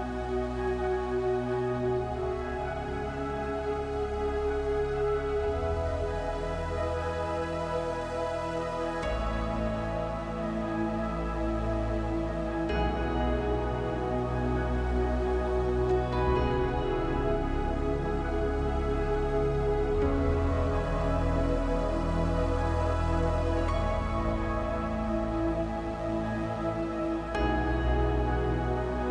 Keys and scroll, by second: 0.1 l, 2.2 space, 6.4 space, 13.8 m, 15.9-16.3 typing, 19.0 typing, 28.0 typing.